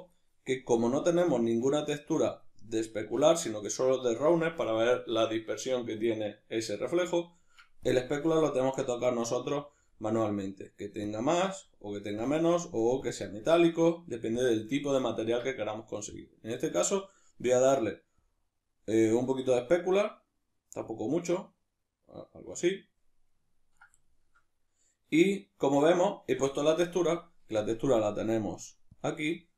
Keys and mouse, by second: 0.6-5.8 middle drag, 7.8-21.4 drag, 21.8-23.5 drag, 23.5-27.5 middle drag, 27.5-29.5 drag.